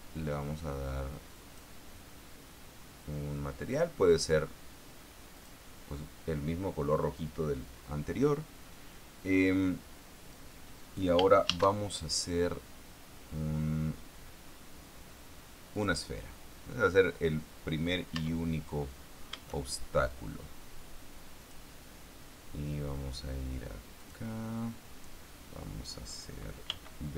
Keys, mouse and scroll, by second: 4.0 click, 5.7 click, 11.8 shift+a, 16.1 click, 18.5 Tab, 20.4-22.1 drag, 24.3 click, 27.0 b.